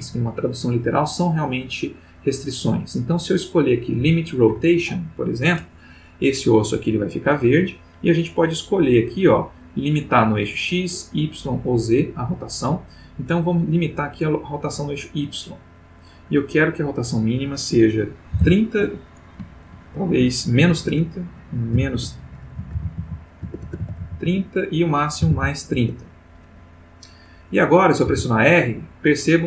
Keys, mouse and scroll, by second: 4.0 click, 15.8 click, 16.9 click, 18.3 3, 18.4 0, 19.4 shift+Tab, 19.7 shift+', 20.7 shift+Tab, 21.7-24.0 typing, 24.2 Tab, 25.2 3, 25.3 0, 25.7 Return, 28.1 r.